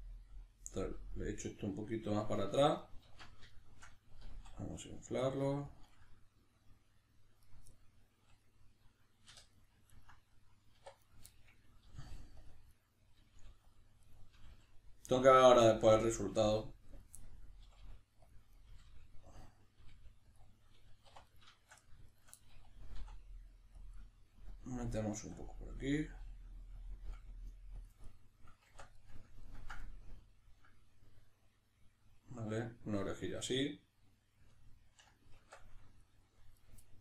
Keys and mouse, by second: 1.2 click, 1.4-5.8 middle drag, 3.0 alt+q, 4.2 s, 5.8 click, 5.9-7.4 middle drag, 7.4 right click, 7.7-9.3 middle drag, 9.3 3, 9.5 right click, 9.9 ctrl+right click, 10.3 middle click, 10.8 1, 11.1 right click, 11.3-12.5 middle drag, 11.9 g, 12.5 click, 12.7 right click, 13.2 g, 13.7 click, 14.0 right click, 14.3 g, 15.2 click, 15.5 right click, 15.6 g, 16.5 click, 16.9 right click, 17.2-18.3 middle drag, 17.6 g, 18.3 click, 18.5 right click, 18.7 g, 19.4 click, 19.8 g, 20.4 click, 21.1 3, 21.3 right click, 22.1 shift+right click, 22.4-23.9 middle drag, 23.0 e, 23.9 click, 23.9-26.9 middle drag, 25.2 s, 26.9 click, 27.1 g, 27.9 click, 28.1-36.6 middle drag, 28.7 Tab, 35.4 Tab, 36.6 right click, 36.8-37.0 middle drag.